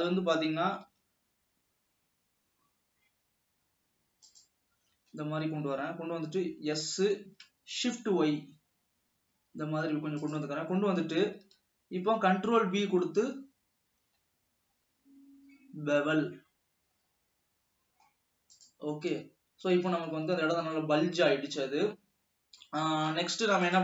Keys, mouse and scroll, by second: 0.6 scroll up 1, 1.3 ctrl+r, 6.9 s, 10.9-11.4 scroll up 1, 12.4 ctrl+b, 19.9 alt+a, 20.3 Tab, 20.8 scroll down 2, 21.1-22.4 middle drag, 22.4 scroll up 1, 22.6 Tab, 23.1 middle click.